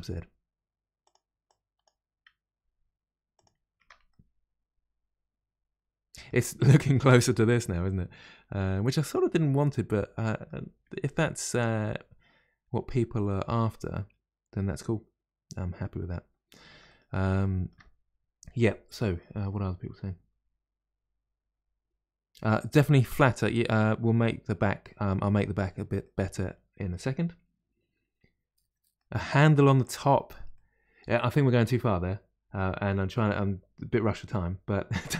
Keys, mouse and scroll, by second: 1.4 click, 2.6 g, 3.8 Tab, 4.0-7.1 middle drag, 7.4-14.1 middle drag, 16.8-17.3 scroll up 2, 17.4-20.4 shift+middle drag, 22.4-25.4 middle drag, 26.0-30.0 middle drag, 30.0-30.5 scroll down 1, 30.5-33.6 middle drag.